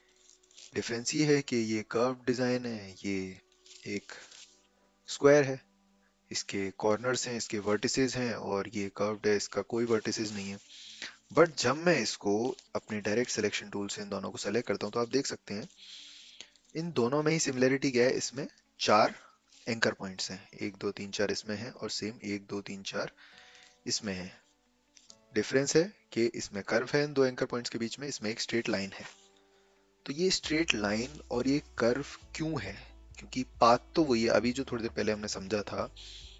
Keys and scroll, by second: 12.3 a.